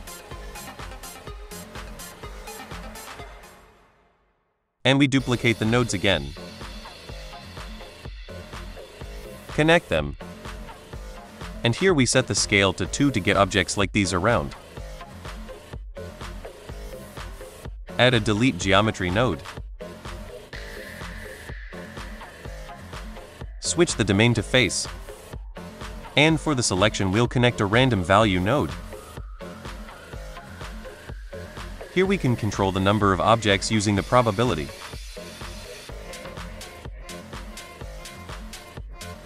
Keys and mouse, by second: 2.9 middle drag, 3.8 click, 4.8 middle click, 5.6 middle drag, 6.1 ctrl+shift+d, 6.8 g, 7.0 y, 7.5 click, 7.8 click, 8.1 middle drag, 9.1-10.5 drag, 10.6 middle click, 11.8 click, 16.6 middle click, 17.3 shift+a, 21.8 middle drag, 22.3-22.6 drag, 22.9-24.5 drag, 25.0 middle drag, 25.6-26.1 drag, 29.7 click, 30.8 middle click, 32.0-35.6 drag.